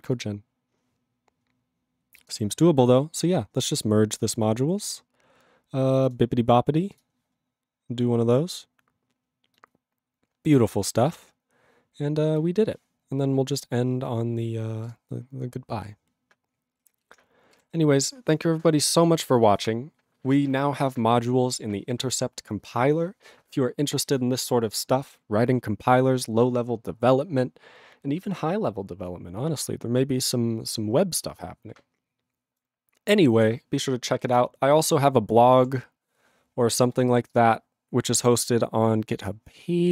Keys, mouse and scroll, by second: 14.9 click, 17.5 ctrl+g.